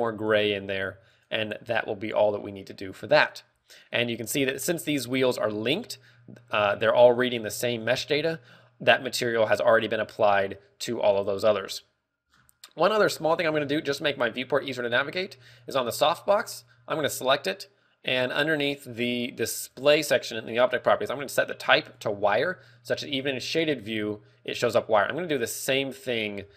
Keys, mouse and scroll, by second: 1.6 click, 3.6 z, 4.2 z, 4.4-4.9 scroll down 2, 4.9 z, 5.6 z, 7.5 click, 12.2 scroll down 2, 12.9-14.2 scroll down 7, 13.3 middle click, 13.9 z, 14.4 a, 15.3 right click, 15.9 right click, 16.5 right click, 17.6 click, 20.1 click, 21.7 click, 22.9 z, 23.3 middle click, 24.0 right click, 25.1 click.